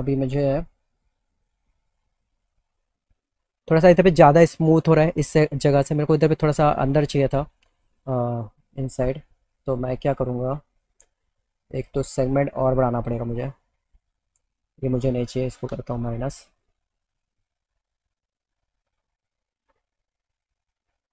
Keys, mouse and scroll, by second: 2.6 alt+middle click, 8.2 alt+middle click, 10.1 click, 13.3 click, 13.5 click, 18.3 click, 20.7 click.